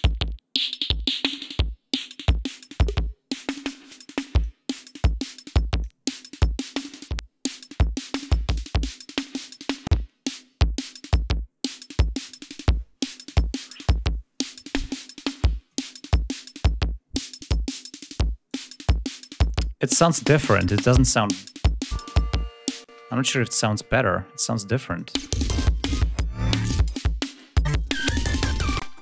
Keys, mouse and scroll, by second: 5.0-6.1 drag, 6.3-12.9 drag, 17.2 click, 18.6 click, 19.2 click, 22.0-23.9 drag, 25.0 click, 25.3 space, 25.6 ctrl+scroll up 1, 27.1 click, 27.8 click, 28.6-29.0 scroll down 3, 28.9 space.